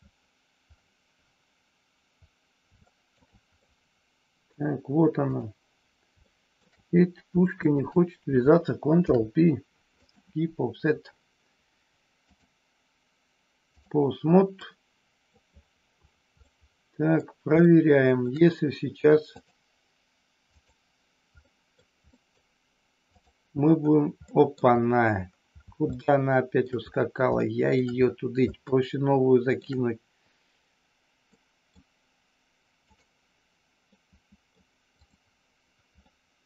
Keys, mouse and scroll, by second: 2.9 shift+middle click, 3.6 middle click, 5.2 click, 6.2 shift+middle click, 7.6 shift+click, 9.0 ctrl+p, 12.2-13.9 drag, 14.6 middle click, 16.4 middle click, 17.6 shift+middle click, 19.4-20.8 drag, 21.5 middle click, 22.1 middle click, 24.2 middle click, 26.0 shift+middle click, 27.4 shift+middle click, 28.6-29.6 shift+middle drag, 31.2 middle click, 32.8 click, 34.0 middle click, 34.9 click, 36.0-36.4 middle drag.